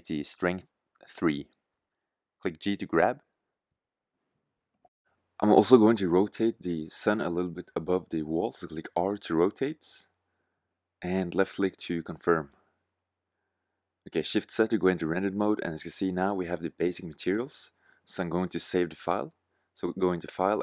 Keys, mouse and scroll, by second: 1.0-2.3 middle drag, 3.1 g, 5.7 g, 7.1 r, 11.1 g, 11.1 r, 12.9 shift+z, 18.5 shift+z.